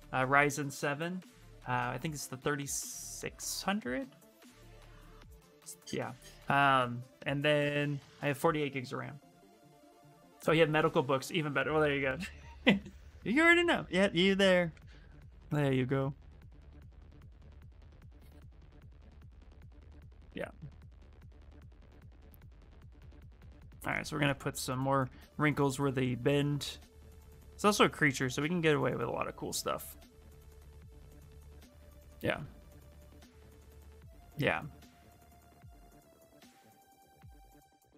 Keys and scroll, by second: 16.0 s, 19.9 ctrl+z, 20.1 s.